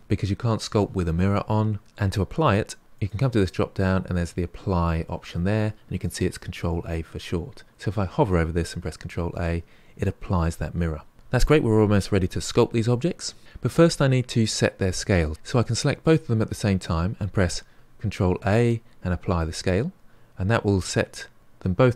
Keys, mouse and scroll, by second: 2.9-6.0 drag, 8.9 ctrl+a, 15.3 click, 16.0 shift+click, 18.1 ctrl+a.